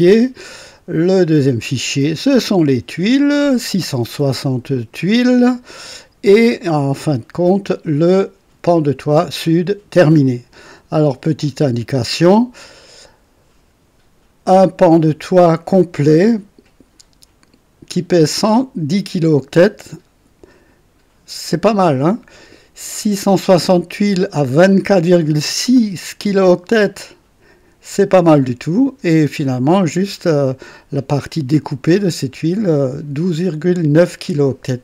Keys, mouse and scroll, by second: 2.0 click, 6.7 click, 12.6 click.